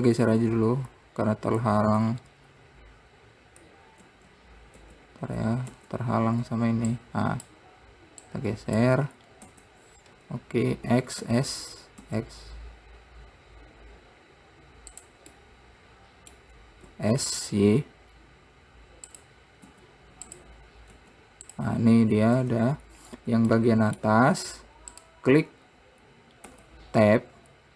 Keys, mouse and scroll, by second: 0.6 ctrl+z, 2.2 ctrl+z, 4.4 ctrl+z, 5.2 ctrl+z, 6.1 Tab, 6.6-7.3 scroll down 2, 7.3 click, 8.7 click, 9.4 scroll up 3, 9.9 Tab, 11.2 e, 15.7-17.3 middle drag, 17.3 s, 20.0 z, 21.4 `, 22.8 Tab, 23.4-23.9 scroll down 2, 23.9-25.4 middle drag, 25.4 click, 27.0 Tab.